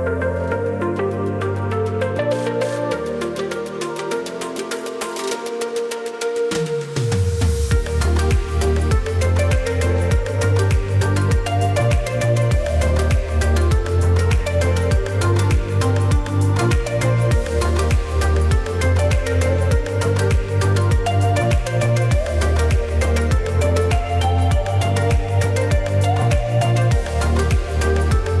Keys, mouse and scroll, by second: 4.3-4.8 typing, 4.5 alt+scroll up 1, 6.8 alt+scroll up 1, 7.5-13.1 drag, 13.1 alt+scroll down 1, 13.8 click, 14.0-14.5 alt+scroll down 1, 14.6 space, 14.8 click, 14.9 space, 15.4-18.3 drag, 18.3-28.4 drag, 19.7 typing, 22.4 typing, 23.8 typing, 25.2 typing.